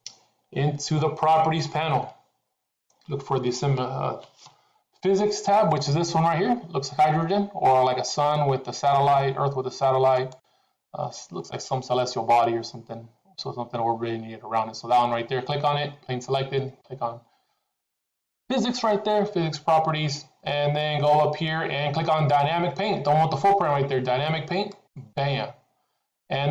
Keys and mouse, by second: 11.6 middle click, 24.7 click.